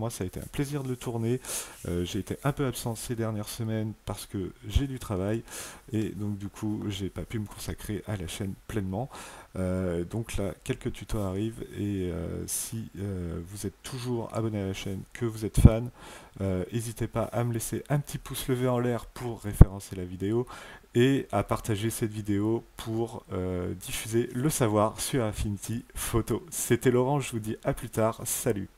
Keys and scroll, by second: 28.7 F10.